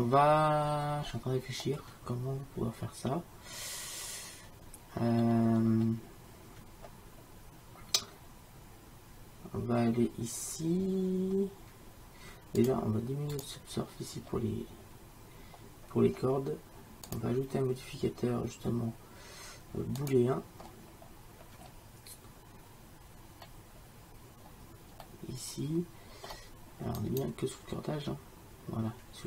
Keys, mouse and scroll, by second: 0.3 middle click, 0.8 middle click, 1.2-3.6 middle drag, 5.7-9.1 middle drag, 12.7-19.0 drag, 25.3-28.2 middle drag, 28.2 click.